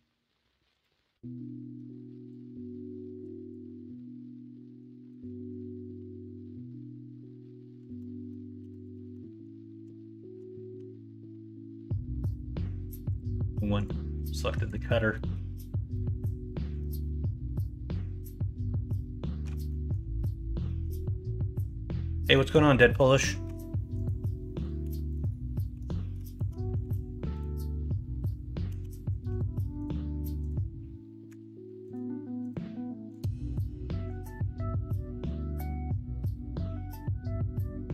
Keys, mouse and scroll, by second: 4.9 middle click, 5.1 click, 5.3-9.4 ctrl+z, 10.7 Tab, 13.7-15.1 drag, 15.1 middle click, 15.9 middle click, 19.6 middle click, 20.6 middle drag, 21.5 middle drag, 22.3 middle drag, 22.9 middle drag, 23.4 Tab, 24.8 ctrl+r, 25.7 3, 26.8 z, 28.6 z, 29.2 x, 31.2 x, 34.2-37.9 drag.